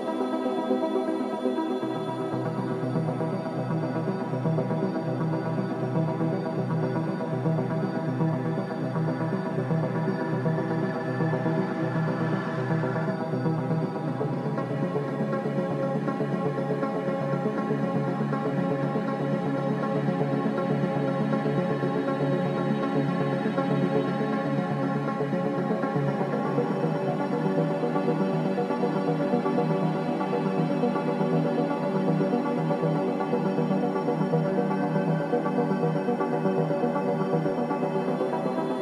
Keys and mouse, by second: 1.7 g, 7.4 KP_0, 10.6 n, 13.8 click, 16.5-20.3 middle drag, 21.4-22.1 shift+middle drag, 22.6-23.2 shift+middle drag, 24.8-27.0 middle drag, 27.2-27.6 shift+middle drag, 27.9-28.6 middle drag, 29.0-29.5 shift+middle drag, 29.8-30.4 middle drag, 31.3-31.8 middle drag, 33.0-33.5 middle drag, 35.8 ctrl+alt+middle click, 36.5 shift+middle click, 37.4-38.7 ctrl+middle drag.